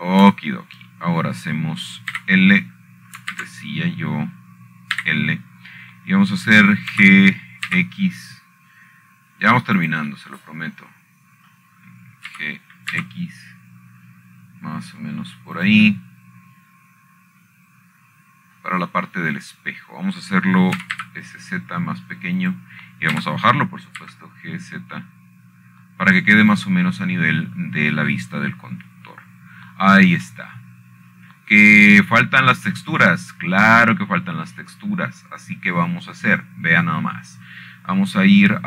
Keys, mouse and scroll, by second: 0.9 shift+click, 1.3 middle click, 1.7 shift+click, 3.0-4.2 shift+middle drag, 4.8 i, 6.1 ctrl+z, 7.7 i, 9.6 g, 10.4 x, 12.5 click, 14.3 middle click, 15.0 g, 15.6 x, 18.3-21.2 drag, 21.2 middle click, 23.5 s, 23.7 z, 25.1 click, 25.9 g, 26.7 z, 29.1 click, 31.6-32.0 scroll down 4, 32.6-36.8 scroll down 3, 37.1-38.5 scroll up 2.